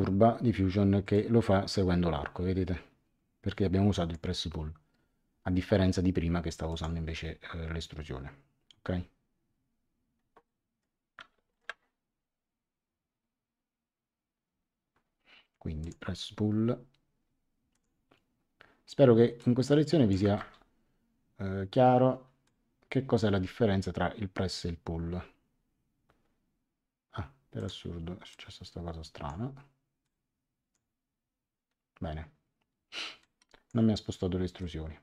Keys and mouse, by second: 1.1 click, 6.7 click, 10.4 middle click, 11.5 shift+middle click, 15.8 click, 17.7 click, 19.3 click, 20.3 Return, 22.4 click, 27.5 click, 30.0 click, 33.2 click, 34.5 click.